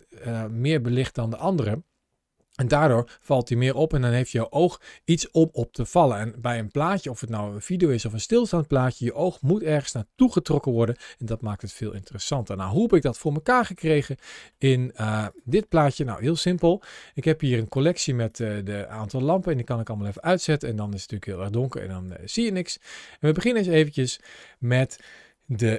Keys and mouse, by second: 14.4 middle click, 15.5 middle click, 18.1 click, 21.4 click.